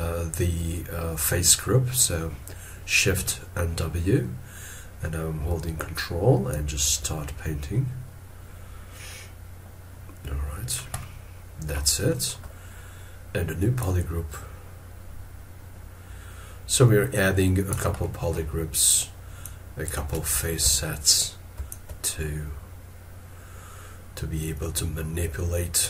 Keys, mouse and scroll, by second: 4.1 scroll up 1, 6.5 ctrl+click, 11.0 middle click, 12.0 middle click, 13.0 scroll down 1, 20.3 scroll, 20.6 ctrl+z, 21.7 ctrl+click.